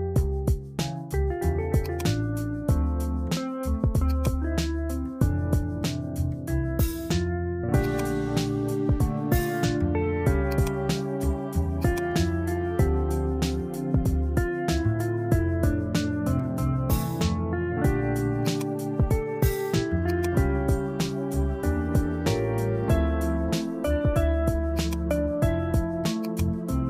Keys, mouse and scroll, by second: 4.1-6.8 drag, 7.8-10.3 drag, 10.5 click, 12.0-14.6 drag, 18.5 click, 20.2-22.8 drag, 24.9 click, 26.3 click.